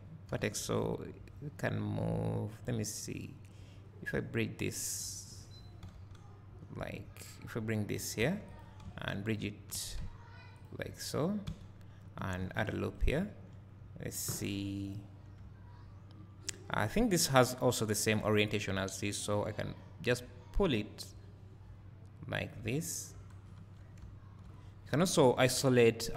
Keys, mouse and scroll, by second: 0.3 g, 11.5 f, 13.1 right click, 13.2 `, 14.9-26.1 drag, 15.4 `, 23.5 Tab, 24.0 `.